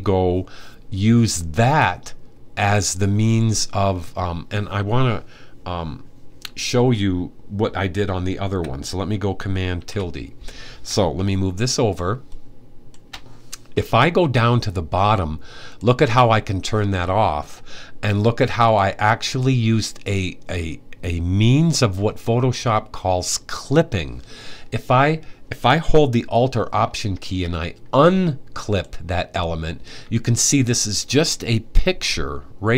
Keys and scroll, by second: 9.4 super+`.